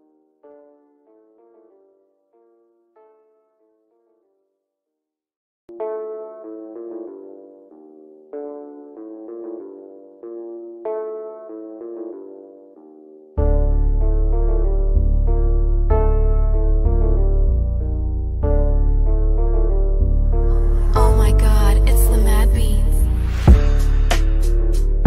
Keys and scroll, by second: 16.7 ctrl+s, 18.2-19.4 typing.